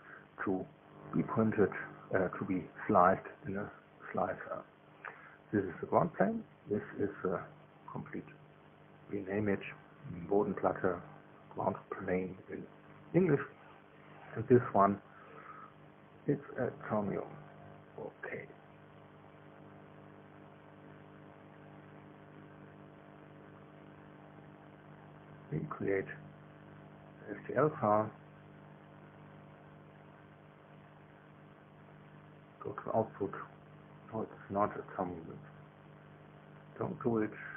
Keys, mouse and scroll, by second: 1.5 click, 4.5 click, 8.4 F2, 9.2-12.0 typing, 12.5 Return, 13.9 click, 14.9 F2, 15.4-17.9 typing, 18.3 Return, 20.4 click, 22.9 click, 24.3 click, 25.5 click, 26.4 s, 26.5 s, 27.7 click, 31.5 click, 32.5 click, 34.7 click.